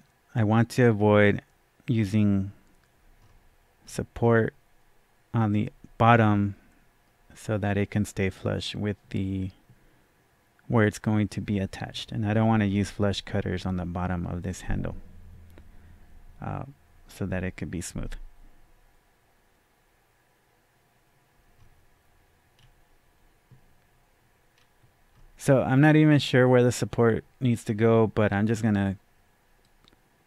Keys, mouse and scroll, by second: 3.1-6.1 right drag, 3.1 scroll down 1, 3.8 scroll down 1, 21.6-22.6 scroll up 1, 24.3 scroll down 1, 29.6-30.2 drag, 29.6-29.9 scroll down 1.